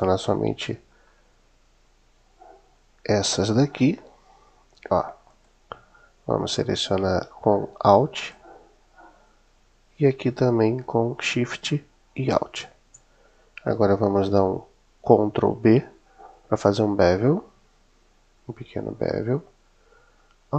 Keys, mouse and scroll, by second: 5.1 click, 8.0 alt+click, 11.9 alt+shift+click, 16.3 super+b.